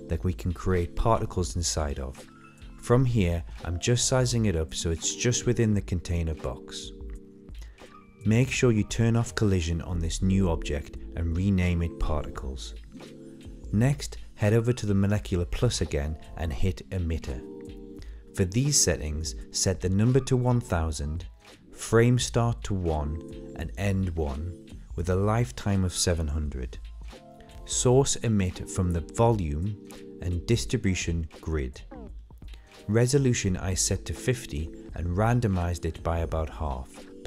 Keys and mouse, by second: 0.6 Tab, 1.8 click, 7.0-9.0 middle drag, 9.4 Tab, 10.3 s, 11.8 ctrl+a, 12.6-13.8 middle drag, 17.8 click, 18.5-20.0 drag, 22.6 click, 25.3 click, 26.0 KP_0, 27.8 click, 29.7 click, 30.3 KP_0, 31.4-31.9 drag, 32.7-33.2 drag, 33.7 middle click, 35.0-36.2 drag, 37.0-37.2 drag.